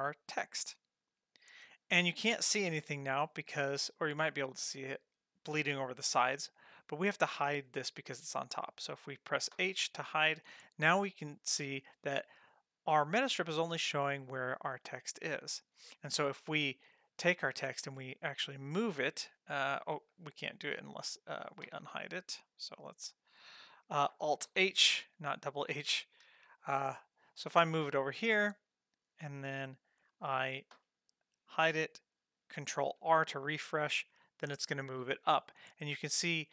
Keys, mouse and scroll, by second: 4.1-6.5 scroll up 3, 6.6 click, 9.5 h, 10.7-11.3 scroll down 4, 12.9 click, 14.6 click, 17.8 g, 19.3 click, 19.9 click, 21.7 h, 21.8 h, 24.5 alt+h, 26.2 g, 30.7 h, 33.0 ctrl+r.